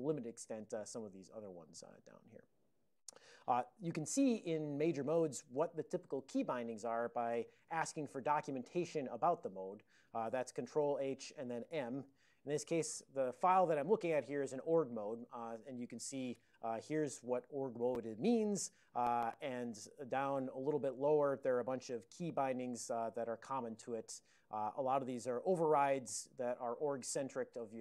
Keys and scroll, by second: 0.3 ctrl+p, 0.7 ctrl+n, 2.9 ctrl+n, 5.0 ctrl+n, 5.2 ctrl+n, 5.4 ctrl+n, 10.8 ctrl+h, 11.8 m, 16.5 ctrl+a, 17.0 ctrl+n, 18.3 ctrl+l, 18.9 ctrl+n, 19.4 ctrl+n, 19.5 ctrl+n, 19.7 ctrl+c, 20.7 ctrl+g, 21.0 ctrl+v, 21.6 ctrl+n, 24.4 ctrl+n, 24.9 ctrl+n, 25.8 ctrl+p, 26.3 ctrl+p.